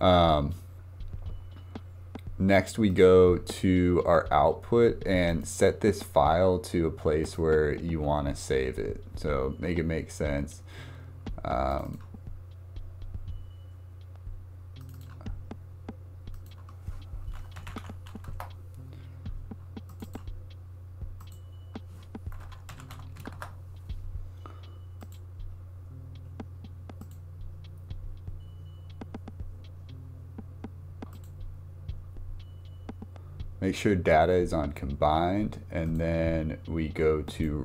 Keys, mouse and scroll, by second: 2.9 click, 5.3-8.4 drag, 27.0-28.0 drag, 31.2 click, 35.9-37.6 drag.